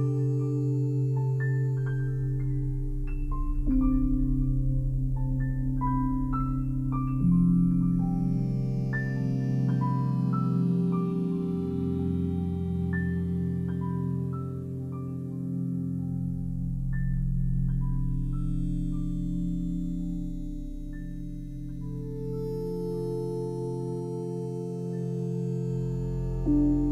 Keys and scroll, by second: 10.1 m.